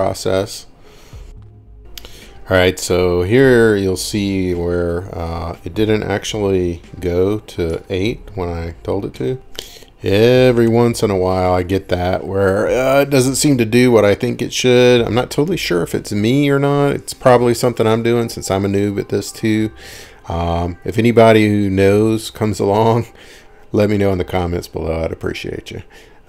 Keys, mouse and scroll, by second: 0.6-1.0 scroll up 5, 1.7-2.0 scroll, 1.7 typing, 3.8 middle click, 5.3 click, 8.8 click, 10.7 s, 12.1 click, 15.1 click, 17.8-18.6 typing, 21.1-21.5 scroll, 21.7-22.4 scroll down 10, 22.2-22.8 scroll up 5, 22.8-23.5 scroll, 24.9 click.